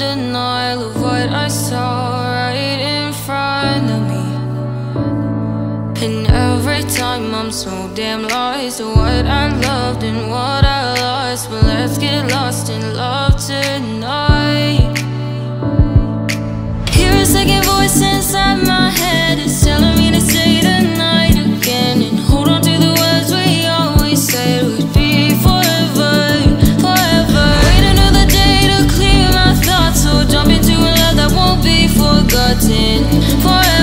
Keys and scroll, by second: 4.9 Right, 6.7 Down, 15.0 ctrl+g.